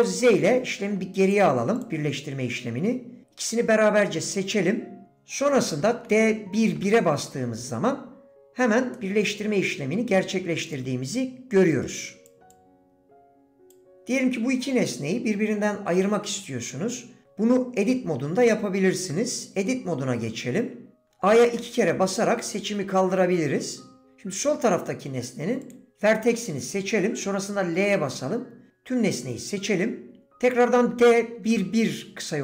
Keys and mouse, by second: 0.5 ctrl+z, 1.2 click, 3.5 shift+click, 8.9-9.6 middle drag, 10.7 click, 11.9 click, 12.6-13.7 drag, 19.2 Tab.